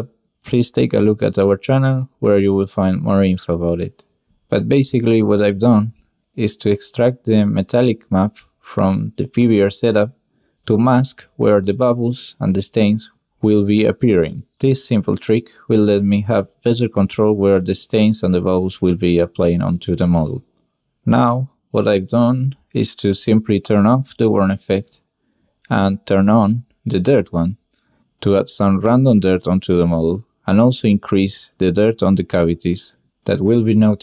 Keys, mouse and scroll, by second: 0.9 click, 1.1 click, 1.6 click, 1.8 click, 2.2 click, 3.0-3.4 drag, 3.6-4.2 drag, 4.7 click, 6.1-6.6 drag, 8.3 click, 8.7 g, 9.7 shift+a, 11.1 drag, 11.4 drag, 12.2 click, 12.8 click, 13.1 drag, 13.5 click, 14.0 click, 16.6 click, 20.4 click, 20.6 shift+click, 22.4-23.8 middle drag, 24.2-26.2 shift+middle drag, 27.0-29.7 shift+drag, 29.7 shift+middle click, 31.0-33.3 middle drag.